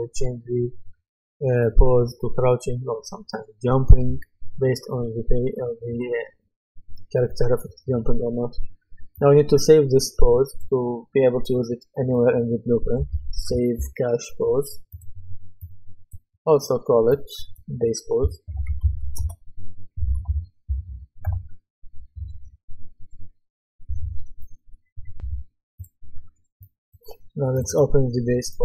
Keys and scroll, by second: 12.7-14.3 typing, 18.2-21.4 typing, 25.2 F10.